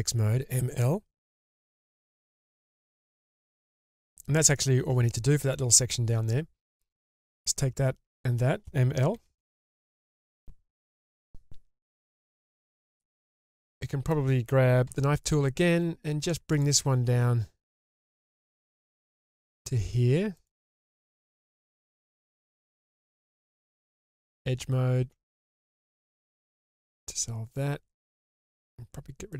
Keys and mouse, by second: 1.5 m, 2.5 click, 3.0-4.1 middle drag, 7.3 click, 9.1 m, 12.7-14.1 middle drag, 14.9 k, 21.9 alt+click, 23.1 2, 24.3 alt+click, 26.1 ctrl+x, 26.9-28.2 middle drag.